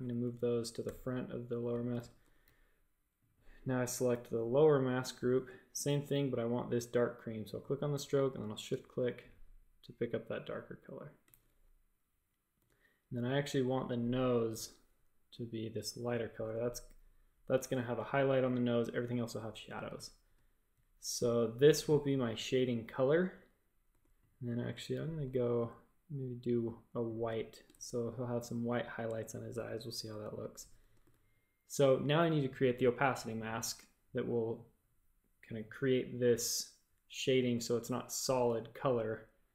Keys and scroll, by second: 0.8 shift+super+], 1.9 shift+super+a, 5.0 i, 11.2 shift+super+a, 12.5 typing, 14.5 typing, 17.6 shift+super+a, 18.4 a, 19.8 space, 21.1 space, 23.8 a, 27.7 shift+super+a, 30.3 space, 30.9 space, 31.0 v.